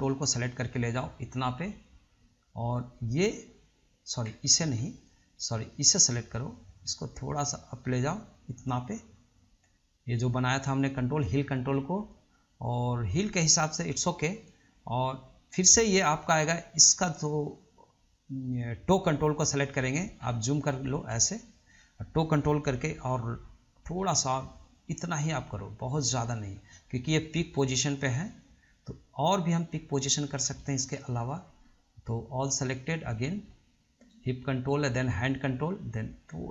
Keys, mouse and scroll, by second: 4.8 ctrl+z, 5.2 drag, 6.0 click, 7.1 click, 18.3 click, 20.0 drag, 20.4-21.1 scroll up 3, 21.1-21.4 scroll down 2, 21.4-23.0 shift+middle drag, 23.0 r, 30.6-31.1 scroll down 1, 31.1-32.8 shift+middle drag, 32.8 click, 34.3 shift+click, 35.4 shift+click.